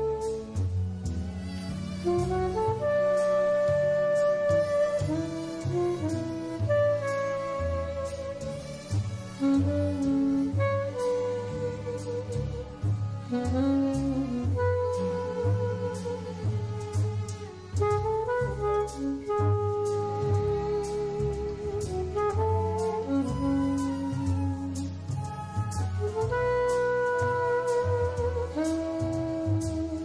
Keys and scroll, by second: 2.0 1, 6.8 1, 10.2 alt+super+space, 19.8 super+y, 20.4 super+z, 23.3 super+y, 28.6 alt+super+space.